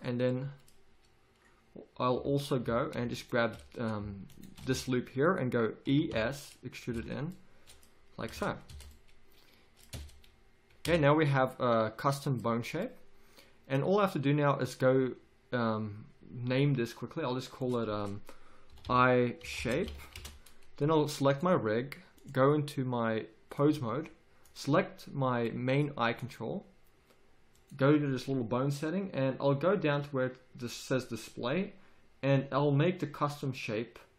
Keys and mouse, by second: 2.6 a, 3.1-6.0 drag, 4.7 z, 6.0 e, 6.9 z, 7.4-10.1 drag, 8.7 Tab, 9.9 Tab, 10.9 Tab, 17.6-20.1 drag, 21.2 click, 23.1 click.